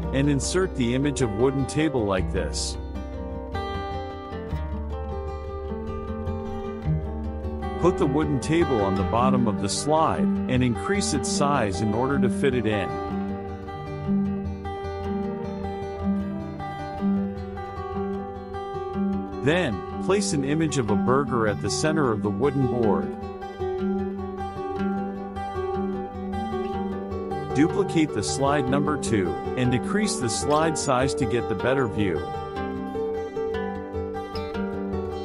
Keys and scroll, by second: 4.5 KP_Subtract, 31.2 KP_Subtract.